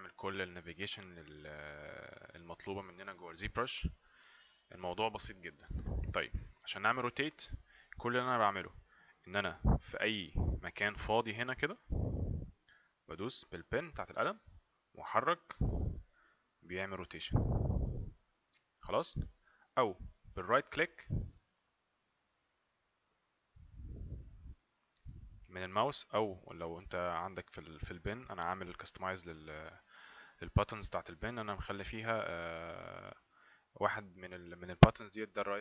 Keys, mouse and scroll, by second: 14.2 click, 21.5 right click, 26.7 right click.